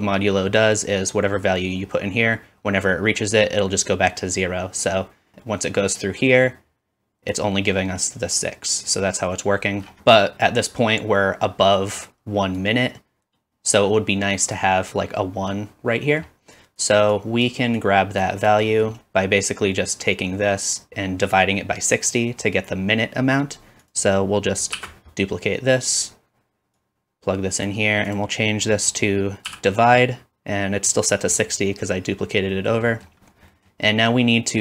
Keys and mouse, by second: 18.5-20.4 middle drag, 23.8 click, 24.8 shift+d, 25.0-26.8 middle drag, 26.8-34.6 drag, 28.1 typing, 29.2 typing.